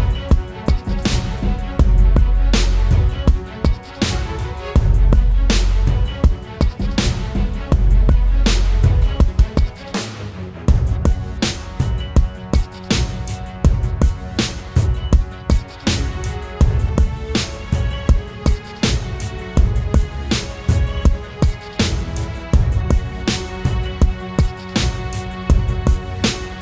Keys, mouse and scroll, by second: 13.7 alt+click, 18.0 ctrl+z.